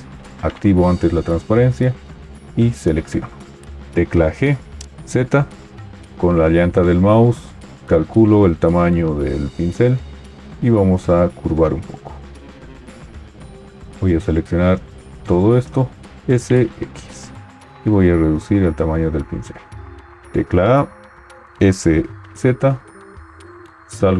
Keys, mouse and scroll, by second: 3.7 g, 3.7 z, 6.1-10.4 middle drag, 16.2 s, 16.2 x, 18.5-19.8 middle drag, 19.8 scroll up 2, 20.6 a, 21.6 s, 21.6 z, 23.9 Tab.